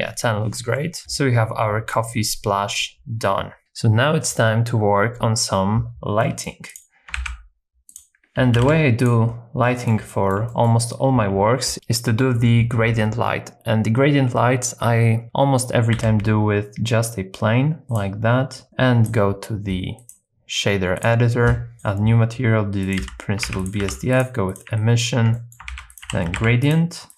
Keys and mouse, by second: 1.8 shift+middle click, 6.2 middle click, 7.3 shift+a, 8.5 g, 8.6 z, 9.0 click, 9.6 middle click, 10.1 shift+middle click, 15.9 z, 18.0 click, 18.6 click, 20.1-21.2 drag, 21.7 click, 23.0 x, 23.6 shift+a, 24.8 alt+right click, 25.4 middle click, 25.7 shift+a.